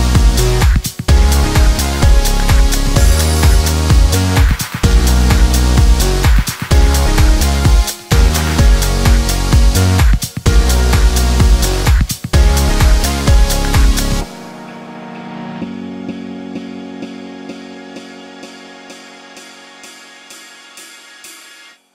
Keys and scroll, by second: 19.9 Escape.